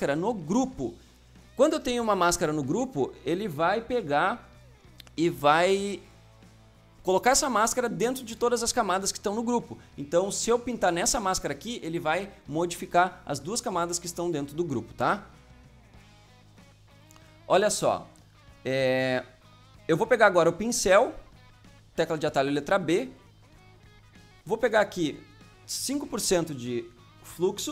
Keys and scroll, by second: 26.3 KP_5.